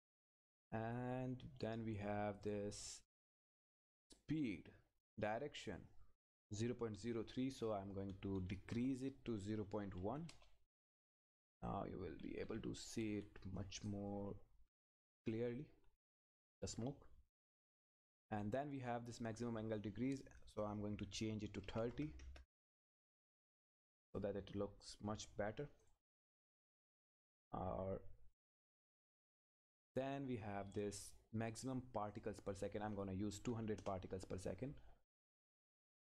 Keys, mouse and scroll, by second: 0.5 click, 7.9 Left, 10.3 Return, 11.6 click, 12.1 Up, 12.9 Right, 13.9 click, 14.7 Up, 16.7-17.2 scroll up 1, 18.8 click, 24.3-24.8 scroll down 1, 24.8 click, 25.0-25.8 scroll up 1, 25.8 click, 26.2 scroll up 1, 26.7 click, 26.9 Up, 27.4 Down, 28.7-30.5 scroll down 1, 32.1 click, 33.8 Return, 35.8 click, 36.0 Left.